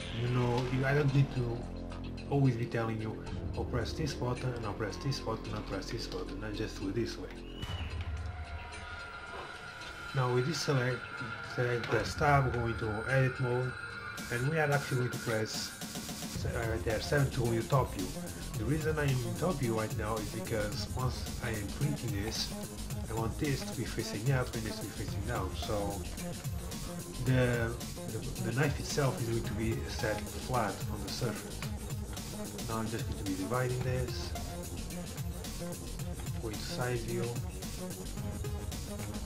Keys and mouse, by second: 0.6 n, 2.8-4.6 drag, 5.6 n, 8.7 a, 9.0 a, 9.3-11.5 middle drag, 10.1 z, 11.9 Tab, 13.6 KP_3, 15.3 KP_7, 17.9 z, 19.3-21.0 middle drag, 22.2 z, 26.1 KP_7, 26.4 z, 30.0 ctrl+r, 31.2 a, 31.5 z, 32.2 z, 32.7 b, 33.8 x, 35.1 KP_1, 36.2 KP_3, 36.4 z, 37.6 s, 38.2 a, 39.0 s.